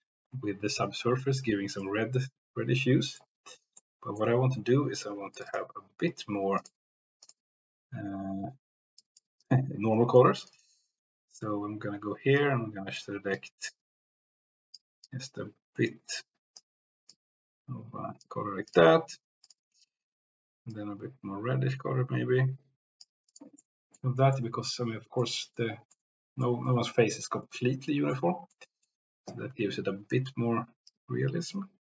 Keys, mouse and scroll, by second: 1.8-2.4 middle drag, 2.4-2.7 drag, 2.7 middle click, 3.8 middle click, 5.6 click, 6.6 click, 8.9 click, 9.9 click, 18.7 click, 19.4 click, 19.7 click, 23.3 drag, 23.7 click, 24.3-25.6 drag, 26.0 click, 26.8 click, 27.6-28.1 drag, 28.6 click, 30.8-31.9 drag.